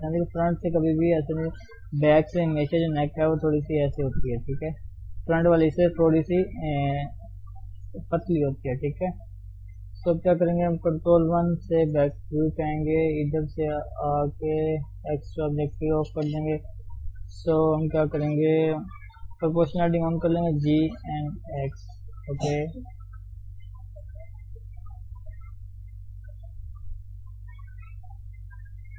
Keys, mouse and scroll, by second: 0.0 shift+z, 0.3-1.7 shift+middle drag, 1.7 scroll down 1, 3.5 click, 4.2 d, 4.8 click, 5.1 d, 5.2-9.1 right drag, 9.1 scroll down 1, 9.2-11.1 middle drag, 11.1 ctrl+KP_1, 14.8 click, 15.3 shift+z, 15.5 shift+middle click, 15.7-17.2 scroll up 1, 17.2-19.0 middle drag, 19.0 o, 20.3 g, 27.3 click.